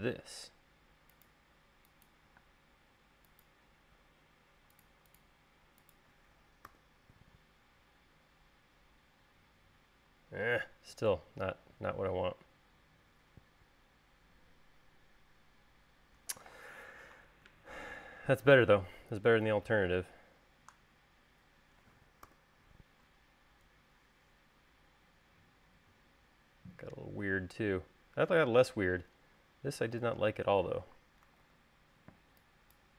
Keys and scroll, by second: 2.7 space, 7.0 u, 17.5 super+z, 22.6 u, 31.8 super+z.